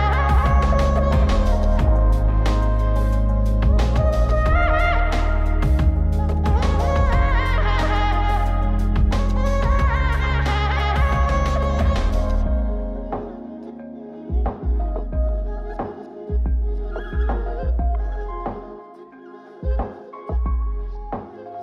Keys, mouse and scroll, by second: 1.3 click, 2.6 middle click, 3.9-5.0 drag, 6.7 click, 7.7 m, 8.7 m, 9.4 m, 10.2 m, 10.8 scroll down 2, 11.3 middle click, 12.3 scroll up 2, 12.8 shift+middle click, 13.2 middle click, 13.9-15.0 scroll up 1, 15.0-18.3 drag, 19.1-21.6 drag.